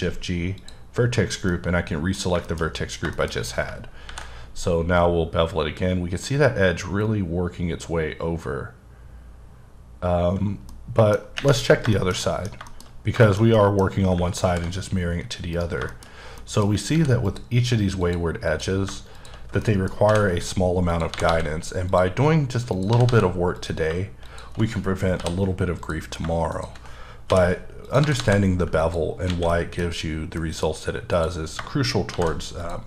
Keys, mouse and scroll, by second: 0.6 click, 1.0-1.5 scroll down 3, 1.5 middle click, 2.6-3.0 shift+scroll up 2, 3.1 shift+middle click, 3.3-4.0 scroll up 2, 4.0 ctrl+b, 6.3-7.9 scroll down 9, 7.9-8.8 scroll down 1, 11.0 middle click, 11.6 scroll down 3, 11.9 shift+middle click, 12.9-13.2 scroll up 2, 13.2 shift+middle click, 13.8-14.5 scroll up 3, 14.5 ctrl+b, 15.5 right click, 15.9 shift+middle click, 16.1 scroll down 1, 16.4 middle click, 16.9 ctrl+r, 17.2 click, 18.0 click, 18.5 click, 19.2 shift+click, 19.6 middle click, 20.1 j, 20.3-20.9 scroll up 1, 20.9 click, 21.1 g, 21.2 g, 21.9 click, 22.7 click, 22.9 g, 23.1 g, 23.6 click, 25.2 j, 25.8 click, 27.3 j, 27.8 click, 28.0 g, 28.2 g, 28.8 click, 29.1-29.4 scroll down 3, 29.4 a, 29.5 middle click, 30.3 middle click, 31.1 click, 32.1 shift+g, 32.6 click.